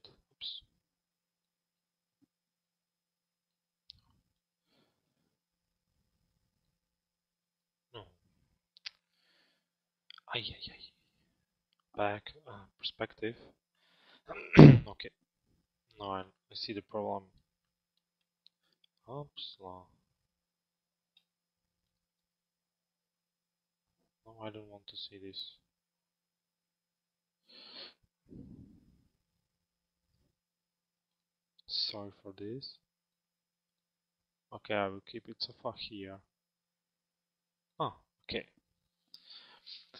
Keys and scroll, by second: 12.4 p.